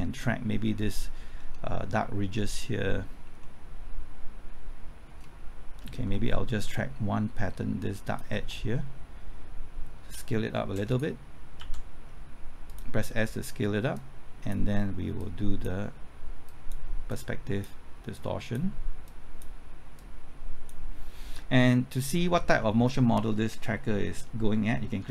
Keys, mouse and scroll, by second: 2.2 scroll up 1, 3.4-5.7 middle drag, 8.0 ctrl+click, 10.0 typing, 10.9 right click, 11.6 typing, 12.7-25.1 drag.